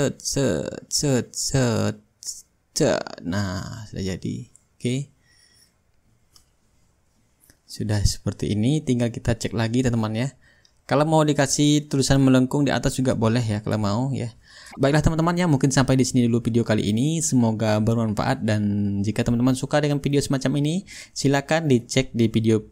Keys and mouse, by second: 4.5-6.1 shift+right drag, 6.2-7.6 drag, 7.8-9.0 middle drag, 12.3-13.4 drag, 14.1 click, 15.0-18.1 shift+right drag, 20.0 ctrl+g, 20.5-22.7 drag.